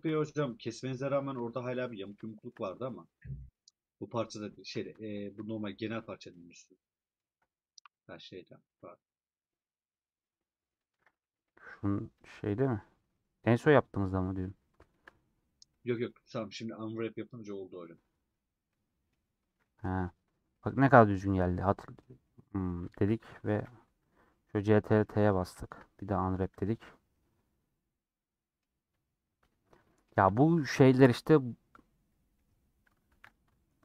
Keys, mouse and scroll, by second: 0.5-1.2 scroll down 7, 1.4-2.8 shift+middle drag, 2.8-3.2 scroll down 1, 3.2-4.6 middle drag, 4.6 a, 5.6-6.0 scroll down 4, 6.3 middle click, 7.2 scroll down 2, 7.8-11.4 middle drag, 11.4 /, 12.1 /, 13.0 middle click, 13.8 click, 13.9 scroll up 2, 14.4 middle click, 15.0-15.6 scroll up 3, 15.6-18.2 middle drag, 18.2-18.6 scroll down 2, 18.6-20.0 middle drag, 20.0-20.4 scroll down 1, 20.4 middle click, 21.1-22.1 scroll up 4, 21.6 middle click, 22.1 middle click, 23.0 a, 24.1-24.5 scroll down 2, 24.6 middle click, 25.2 a, 26.2 middle click, 26.8 Tab, 27.0-28.8 middle drag, 28.8 Tab, 29.8-32.3 middle drag, 32.3 scroll up 1, 33.1 1, 33.6-33.8 shift+middle drag.